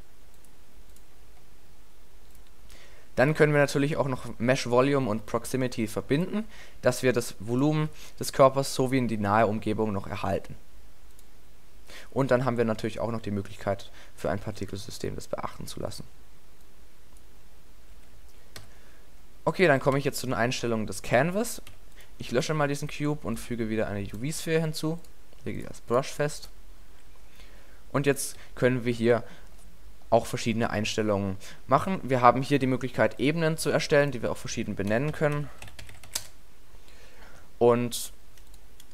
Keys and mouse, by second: 5.2-7.5 middle drag, 7.9 alt+a, 9.0 alt+a, 11.0 middle click, 18.6 a, 20.0 x, 21.7 x, 22.4 shift+a, 28.4 alt+a, 29.0 alt+a, 33.2-37.7 drag, 38.5-38.9 drag.